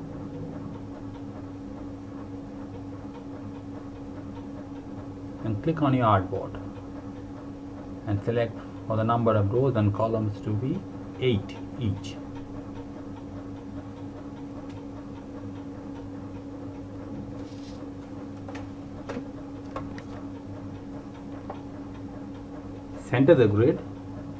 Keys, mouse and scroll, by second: 1.9 click, 4.9 click, 17.6 click, 22.9 click.